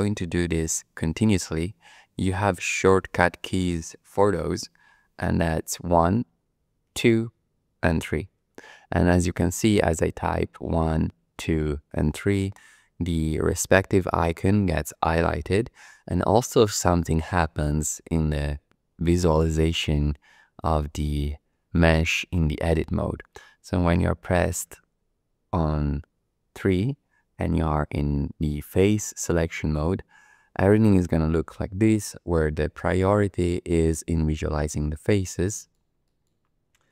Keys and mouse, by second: 5.8 1, 6.8 2, 7.9 3, 10.7 1, 11.2 2, 12.0 3, 24.7 3, 31.0 click, 31.1 middle click, 31.6 shift+middle click, 32.8 shift+middle click, 35.5 shift+middle click, 36.0 shift+click, 36.7 2.